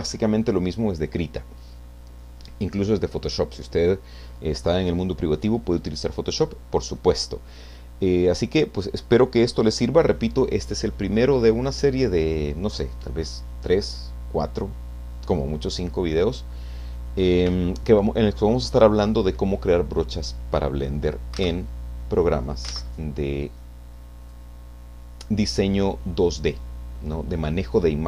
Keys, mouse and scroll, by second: 0.5 click, 21.4 alt+Tab, 22.7 alt+Tab, 24.2 click.